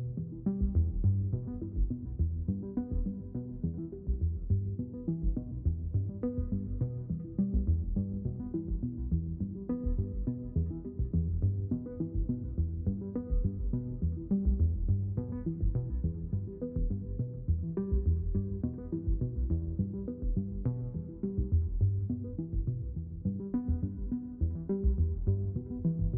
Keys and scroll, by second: 4.5 space, 13.8 space.